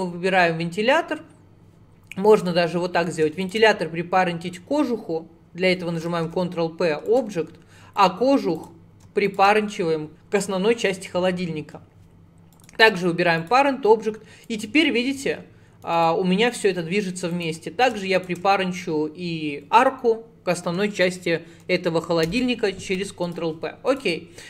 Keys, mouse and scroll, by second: 0.8 scroll up 1, 2.4 scroll up 2, 2.4 click, 3.4 shift+click, 6.3 ctrl+p, 8.0 click, 8.6 click, 9.3 shift+click, 10.1 ctrl+p, 13.4 click, 14.5 click, 17.4 click, 18.2 shift+click, 22.3 ctrl+p, 23.9 click.